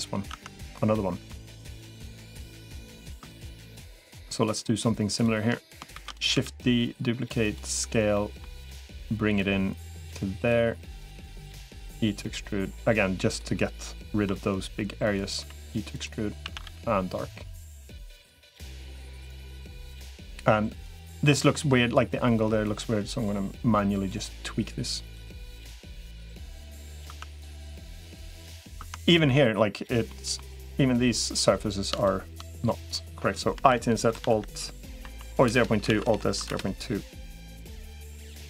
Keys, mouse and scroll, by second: 0.1 Tab, 0.8 middle click, 1.7 3, 1.9 middle click, 3.9 click, 4.3 shift+click, 4.9 shift+click, 5.9 shift+d, 6.3 s, 7.9 middle click, 8.7 click, 9.9 click, 10.9 click, 11.7 e, 14.1 i, 15.3 e, 16.3 a, 16.5 g, 17.8 middle click, 19.7 click, 21.1 middle click, 22.5-23.9 drag, 24.1 s, 25.7 click, 26.9 Tab, 27.5 click, 27.9 middle click, 28.7 Tab, 28.9 click, 29.9 middle click, 33.5 i, 35.7 alt+s, 37.7 click.